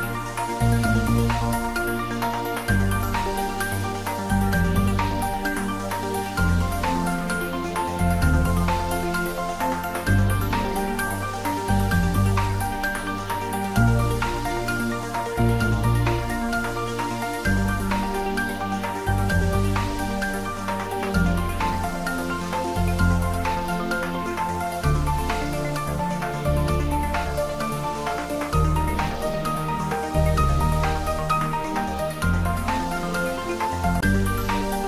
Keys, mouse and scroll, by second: 1.7 click, 4.6 Tab, 15.3-16.0 scroll up 1, 16.1-17.0 scroll down 1, 18.2-19.3 scroll down 1, 23.3-26.2 middle drag, 26.2 click, 33.3 Tab, 34.2 click.